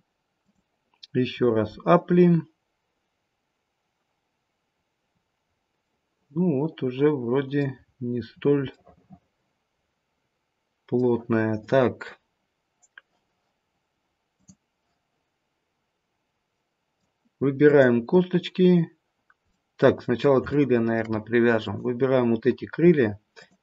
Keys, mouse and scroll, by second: 4.4-5.0 scroll up 1, 5.0-5.7 scroll up 3, 5.9 middle click, 5.9-7.2 scroll up 2, 8.0-8.9 scroll down 6, 8.7 middle click, 14.3 click, 16.5 middle click, 17.6 click, 19.4 middle click, 20.5 shift+middle click, 21.5 click, 23.3 shift+click.